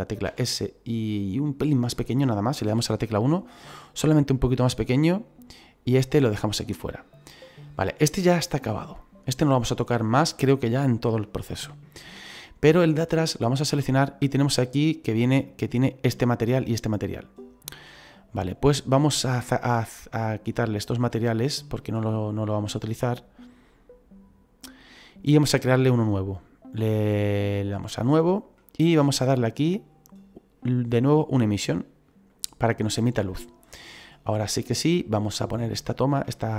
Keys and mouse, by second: 0.2 s, 1.5 click, 2.6 KP_1, 4.1 middle click, 5.9 right click, 7.4 middle click, 10.4 middle click, 13.2 right click, 15.4 right click, 20.8 click, 24.6 click, 27.9 click, 30.1 click, 32.2 click, 34.0 middle click, 35.0 shift+middle click, 36.3 middle click.